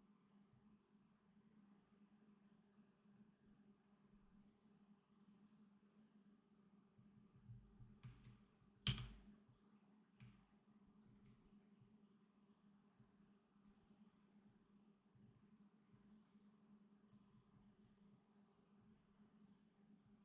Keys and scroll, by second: 8.7 d.